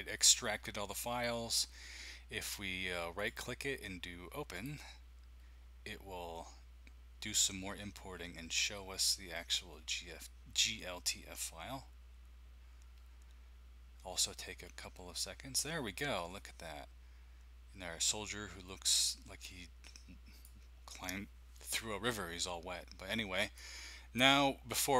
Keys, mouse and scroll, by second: 3.1-5.5 drag, 20.5-22.1 drag, 23.6-24.9 drag.